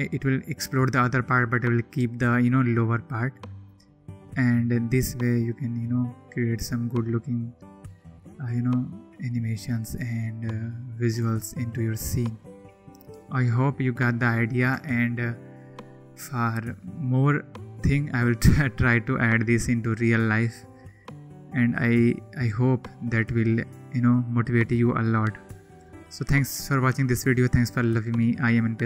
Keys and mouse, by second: 3.1 drag, 4.2 click, 13.5 click, 17.7 click, 18.9 click.